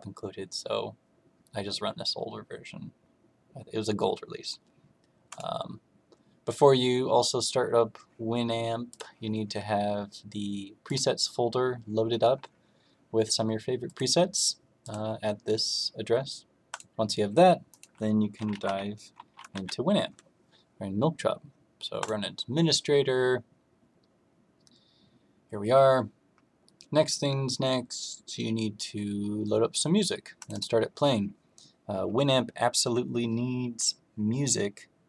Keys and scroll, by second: 18.1-19.0 typing.